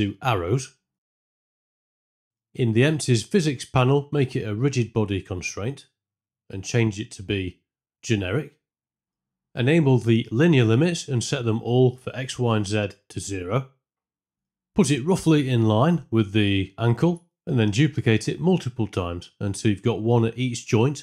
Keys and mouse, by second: 4.0 click, 7.8-9.0 drag, 9.9 drag, 10.6 drag, 13.0 click, 14.1 KP_0, 14.1 KP_1, 16.0 shift+d, 17.8 shift+d, 18.5 click, 19.0-21.0 typing, 19.9 click, 20.5 click.